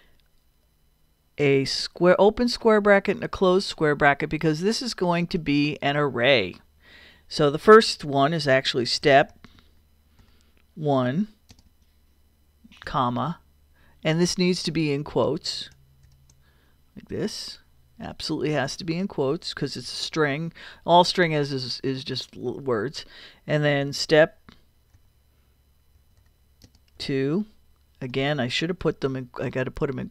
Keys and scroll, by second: 2.0 [, 3.0 ], 8.6-10.2 typing, 11.5 space, 11.7 |, 12.9 ,, 16.0 shift+', 19.8 shift+', 23.8 shift+s, 25.1 t, 26.2 p, 26.6 space, 27.0 2, 28.8 shift+'.